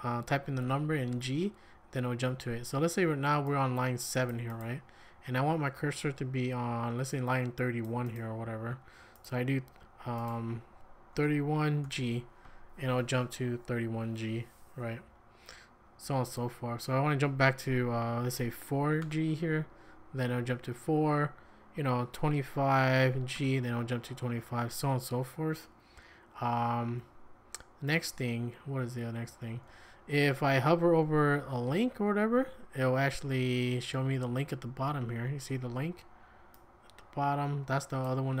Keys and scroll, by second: 10.9-12.4 typing, 18.6 4, 19.0 g, 22.5-23.8 typing, 29.0-34.5 typing.